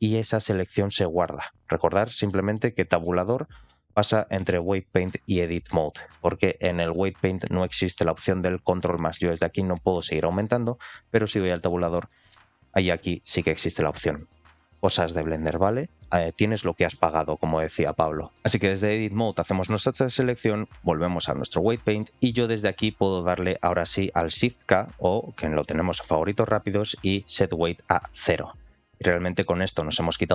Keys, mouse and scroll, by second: 2.9 Tab, 3.5 Tab, 4.3 Tab, 5.0 Tab, 5.6 Tab, 6.8 Tab, 8.5 ctrl+KP_Add, 8.8 ctrl+KP_Add, 9.4 ctrl+KP_Add, 9.8 ctrl+KP_Add, 10.0 ctrl+KP_Add, 10.4 ctrl+KP_Add, 11.4 Tab, 12.2 ctrl+KP_Add, 12.4 ctrl+KP_Add, 13.1 ctrl+KP_Add, 20.9 Tab, 21.9 middle click, 30.2-30.3 middle drag.